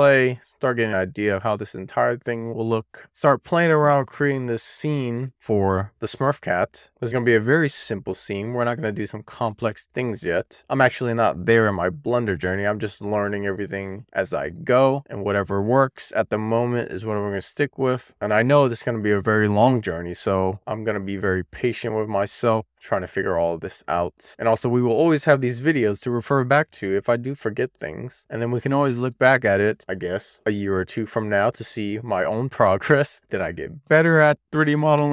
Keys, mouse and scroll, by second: 0.1 click, 0.8-2.2 scroll up 4, 2.2 middle click, 2.6-3.0 scroll down 1, 3.4 middle click, 4.5 shift+middle click, 4.8 middle click, 5.3-6.7 scroll down 1, 6.7 click, 8.4-9.4 scroll down 1, 16.1 click, 17.7-18.6 scroll down 1, 18.6 click, 20.2-20.8 scroll down 1, 21.0 click, 22.7 click, 22.8-23.6 scroll down 1, 23.6 click, 25.1-25.9 scroll down 1, 25.9 click, 27.6-28.2 scroll down 1, 28.2 click, 29.7-30.5 scroll down 1, 30.5 click, 31.8-32.2 scroll down 1, 32.7 click, 34.0-34.8 scroll down 1, 34.8 click.